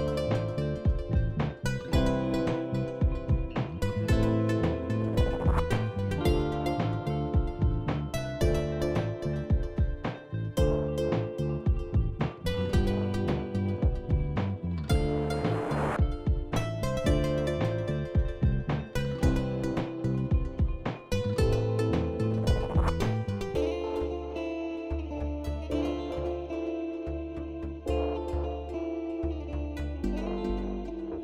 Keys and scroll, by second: 14.8 shift+Left, 15.3 ctrl+c, 16.0 Down, 16.3 Down, 16.8 shift+Left, 17.3 ctrl+v, 17.7 Down, 18.2 shift+Left, 18.8 ctrl+v, 19.1 Down, 19.4 Left, 20.0 shift+Right, 20.6 ctrl+v, 26.4 ctrl+c.